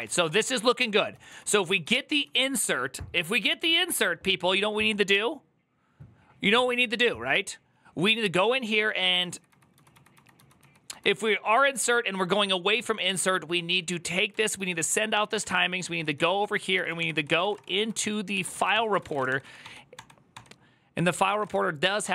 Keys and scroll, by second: 0.0-0.9 typing, 9.3-10.9 typing, 11.9-18.9 typing, 17.8 ctrl+n, 18.1 ctrl+c, 18.3 Return, 18.5 ctrl+t, 18.7 ctrl+c, 18.9 Return, 19.0 ctrl+d, 19.2 ctrl+d, 19.7 ctrl+d, 20.8-22.1 typing, 21.8 ctrl+d.